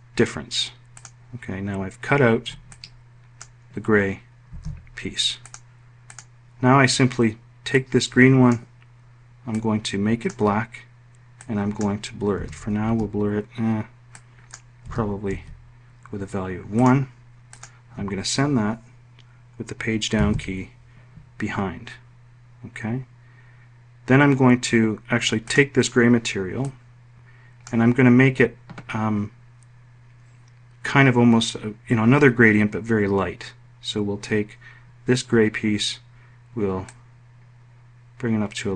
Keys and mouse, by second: 2.2 ctrl+click, 4.0 ctrl+z, 11.8 2, 12.3 Tab, 14.3 1, 14.8 Tab, 19.7 Page_Down.